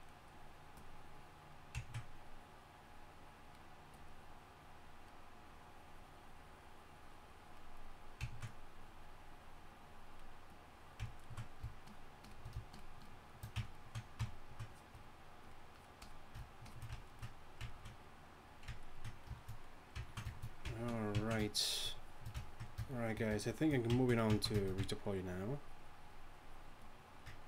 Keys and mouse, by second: 1.6-7.8 middle drag, 7.8-8.2 drag, 8.2-10.5 middle drag, 10.5-11.0 drag.